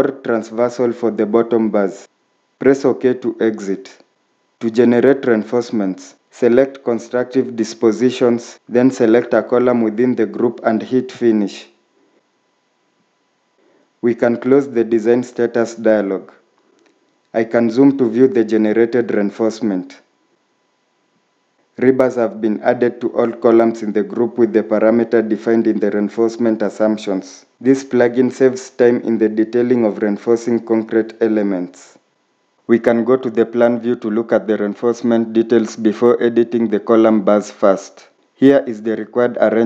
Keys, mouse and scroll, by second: 13.5 click, 18.3-19.8 scroll up 1, 25.7 shift+middle click, 37.0 scroll up 1.